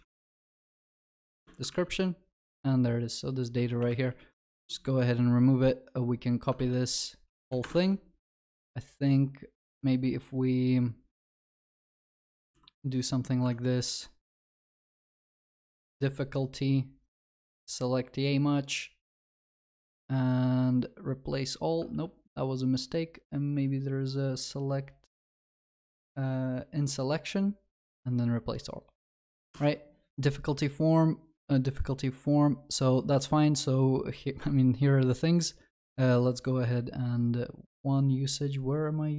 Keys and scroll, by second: 1.3 ctrl+w, 1.7 Return, 1.8 ctrl+s, 3.8 ctrl+s, 4.1 ctrl+y, 4.6 ctrl+s, 6.6 ctrl+c, 7.7 ctrl+v, 12.6 ctrl+r, 21.9 ctrl+z, 29.1 Escape.